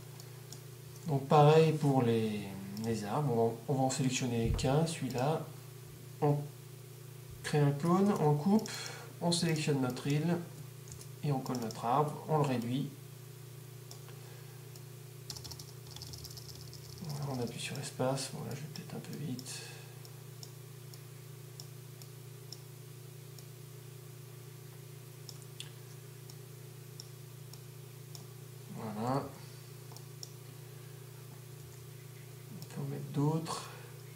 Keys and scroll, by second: 0.8 -.